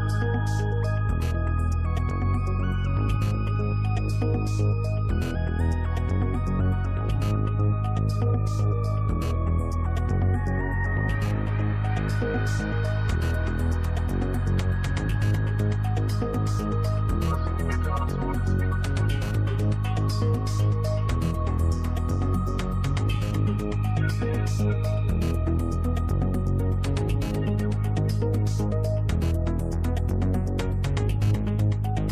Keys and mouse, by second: 2.1 middle click, 6.4 middle click, 11.4 click, 17.0 click, 20.0 click, 21.5 click, 22.7 click, 23.0-23.4 drag, 24.0 click, 25.3 shift+a, 30.9 shift+a.